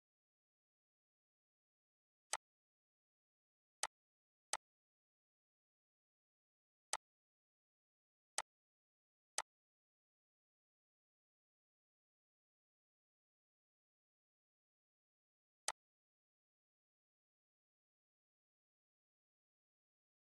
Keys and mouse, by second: 1.9-7.8 drag, 15.3-20.3 drag.